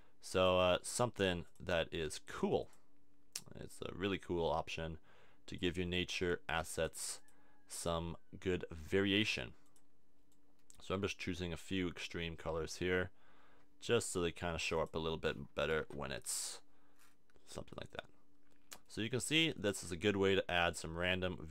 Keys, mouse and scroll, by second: 18.9-21.5 middle drag.